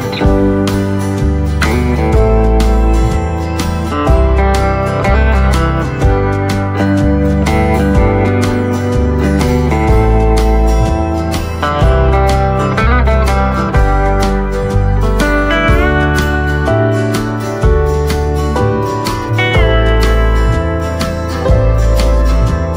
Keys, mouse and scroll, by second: 0.8 shift+click, 1.0 shift+right click, 1.6-2.0 scroll up 1, 4.1-5.3 typing, 9.3 right click, 12.0 click, 16.1 ctrl+z, 16.5 click, 18.0 right click, 18.9-20.0 scroll up 1, 20.1 shift+right click, 22.0 click.